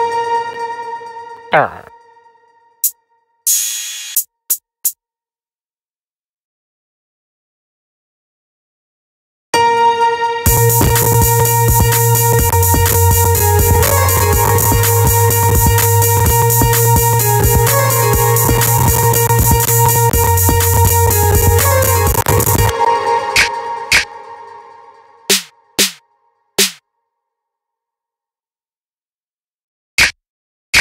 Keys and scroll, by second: 9.5 space, 22.2 space.